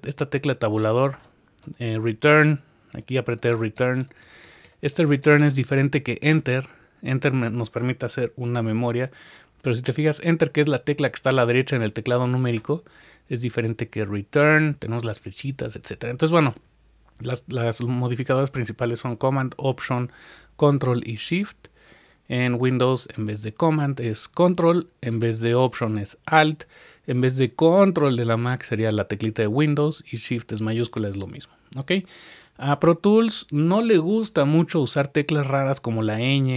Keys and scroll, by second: 0.0 Tab, 1.7 Return, 3.0 Return, 3.3 Return, 3.8 Return, 4.0 Return.